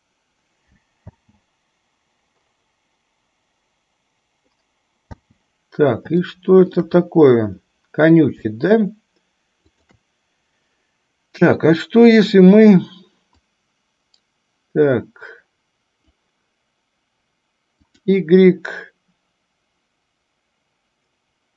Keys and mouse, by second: 1.2 space, 5.4 space, 6.4-7.1 shift+middle drag, 13.6-16.3 drag, 18.0-18.4 drag.